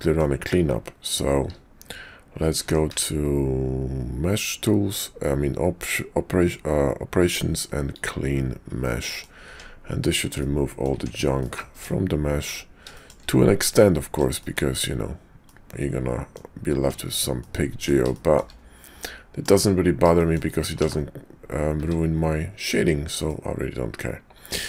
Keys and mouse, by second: 2.6 Tab, 2.9 q, 9.0 click, 9.5 Tab, 10.4 click, 10.9 Tab, 11.4 click, 11.7 Tab, 12.4 click, 12.9 shift+click, 13.8 click, 14.4 shift+click, 15.4 click, 16.8 Tab, 17.4 click, 18.1 shift+middle click, 18.2 shift+click, 19.0 middle click, 20.1 shift+middle click, 20.8 /, 21.8 `, 22.6 click, 23.3-24.5 middle drag, 24.5 `.